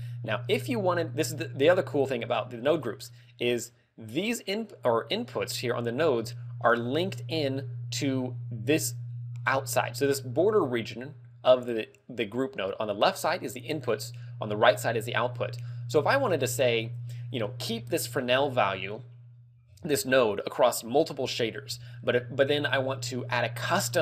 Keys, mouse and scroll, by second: 1.3 click, 2.6 scroll down 4, 3.0 middle click, 3.5-4.2 scroll up 3, 9.9 middle click, 10.4-10.8 scroll down 3, 16.2 middle click, 16.6-17.5 scroll up 1, 17.5 scroll up 1, 18.0 middle click.